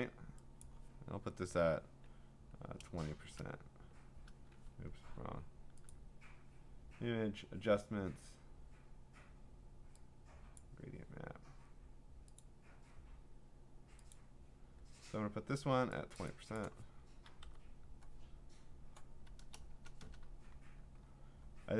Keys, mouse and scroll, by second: 0.6 click, 2.4-3.3 typing, 4.9 Escape, 5.9 click, 10.6 click, 12.4 click, 14.1 click, 16.2 click, 16.6 click, 17.0-17.9 typing, 19.7-21.0 typing.